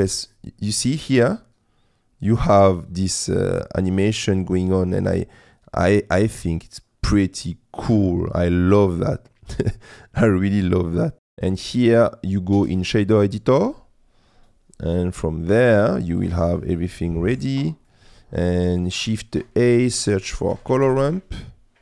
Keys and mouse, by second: 11.4-12.9 drag, 13.8 middle click, 14.7 click, 15.7 click, 16.8 click, 17.6 click, 18.1 click, 19.1 shift+a.